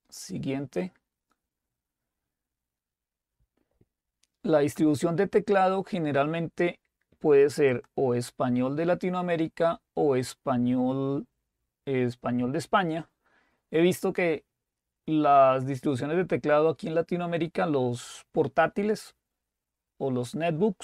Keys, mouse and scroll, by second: 0.6 click, 5.8-6.5 scroll down 2, 6.5-7.4 scroll down 1, 8.1 click, 10.3-11.3 drag.